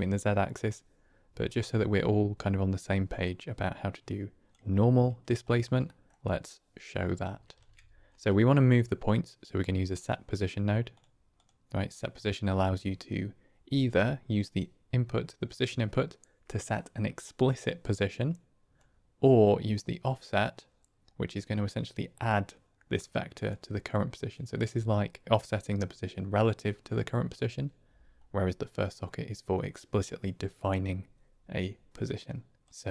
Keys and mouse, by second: 3.9 click, 5.8 middle click, 7.5 shift+a, 14.3-18.7 drag, 20.4-21.7 drag, 22.9 click, 23.8-24.2 drag, 28.8-32.6 drag, 32.6 click.